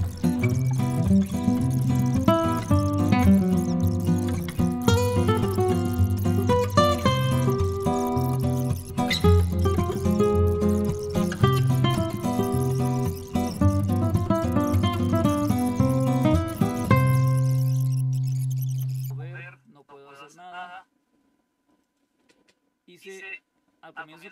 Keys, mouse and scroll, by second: 0.0 click, 0.2 Left, 0.3 0, 0.4 click, 0.6 right click, 0.7 click, 1.5 click, 2.2 click, 2.4 click, 2.6 click, 3.2 click, 3.4 click, 4.2 click, 4.3 click, 4.4 right click, 4.7-6.2 typing, 6.2 click, 6.3 click, 6.6 click, 6.8 click, 6.9 click, 7.4 click, 7.6 click, 8.1 click, 8.5 click, 8.9 click, 9.0 click, 9.5-10.3 scroll down 1, 10.6 click, 10.9 click, 11.3 click, 11.5 click, 13.3 click, 13.7 click, 13.9 click, 14.1 scroll down 1, 14.6 click, 15.9 click, 16.1 click, 16.4 click, 16.7 click.